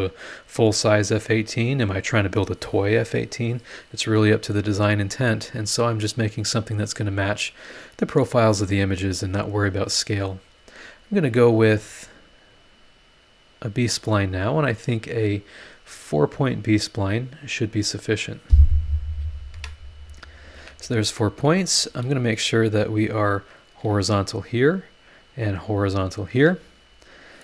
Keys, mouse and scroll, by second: 12.1 click, 12.3-13.7 middle drag, 13.7 click, 14.0-15.3 middle drag, 15.3 click, 15.6 middle click, 16.3 click, 16.5 middle click, 18.1 click, 19.5 Escape, 20.6 Escape, 21.7 click, 23.3 click, 23.8 h, 25.0 click, 26.1 click, 26.4 h.